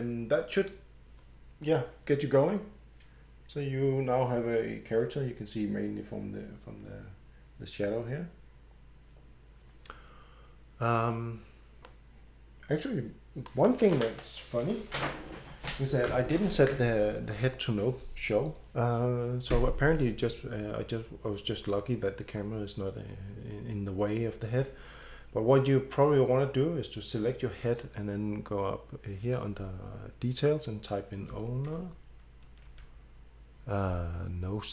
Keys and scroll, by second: 17.4 Escape, 31.3 o, 32.7 w.